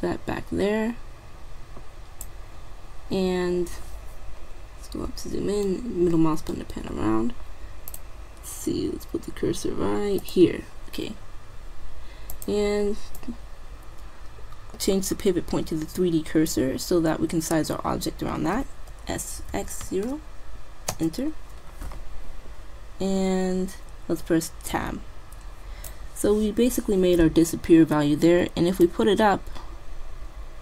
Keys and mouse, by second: 4.5-5.7 middle drag, 7.3 middle click, 8.0-9.7 drag, 10.2-12.1 drag, 12.1 middle click, 12.3-14.3 drag, 19.1 s, 24.8 Tab, 25.9-27.7 drag, 28.9-30.6 drag.